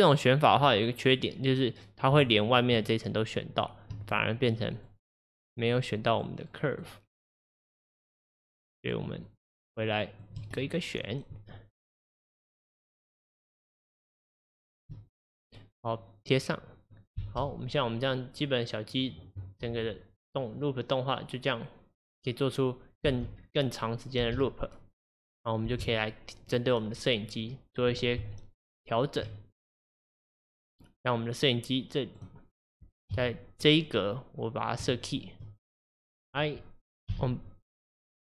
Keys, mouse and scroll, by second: 0.2 click, 0.6-1.9 scroll down 1, 1.9 scroll down 5, 2.3-10.6 shift+drag, 10.6-12.2 middle drag, 12.2 shift+click, 12.8-15.2 shift+drag, 15.2-16.3 scroll up 5, 16.3 shift+click, 17.2 space, 19.4 scroll down 1, 23.1 space, 23.5-24.3 scroll down 1, 24.3 space, 25.7 space, 26.5 click, 27.4 click, 28.3 Tab, 29.7 click, 30.3-31.3 scroll down 5, 31.5-33.3 drag, 33.2 KP_7, 35.0-37.2 shift+middle drag, 37.2 i, 38.1-38.3 middle drag.